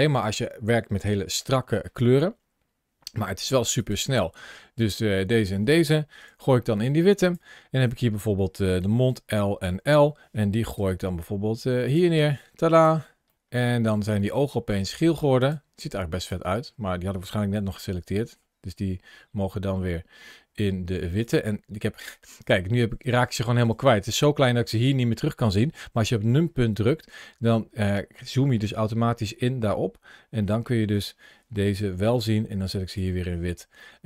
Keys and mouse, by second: 3.6 click, 4.6 shift+click, 6.1 g, 7.0 click, 8.9 l, 9.5 l, 10.6 g, 11.7 click, 12.6 click, 13.1 middle click, 17.6 g, 22.8 click, 23.4 shift+click, 25.9 KP_Decimal, 30.3 shift+middle click, 31.6 g, 32.7 click, 33.7 shift+middle click.